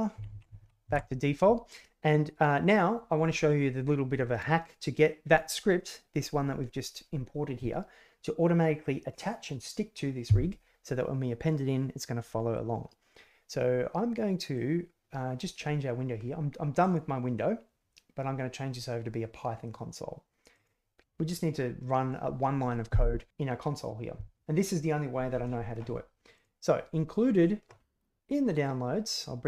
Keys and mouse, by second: 0.6 a, 0.9 alt+r, 1.9 alt+g, 14.5 click, 16.9-20.8 drag.